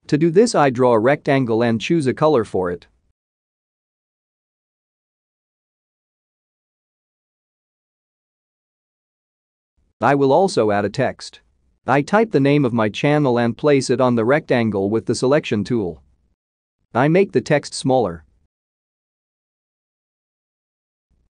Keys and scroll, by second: 11.9-14.3 typing, 15.8-16.6 typing.